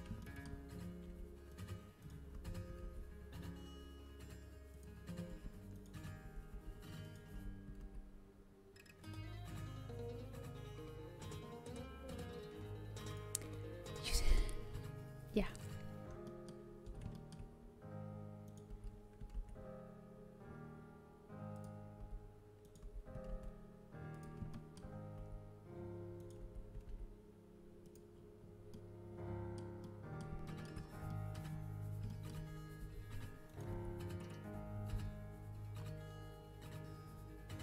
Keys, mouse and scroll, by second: 0.1 middle click, 1.0 z, 1.4 middle click, 2.3 z, 2.6 g, 5.2 z, 6.2 g, 7.3 z, 8.6 g, 15.8 middle click, 16.8 z, 18.4 middle click, 18.6 z, 20.0 g, 21.9 z, 22.7 z, 23.1 g, 25.1 z, 26.1 click, 26.3 z, 26.9 g, 28.1 middle click, 28.6-32.5 middle drag, 32.7 z, 33.6 z, 34.7 g.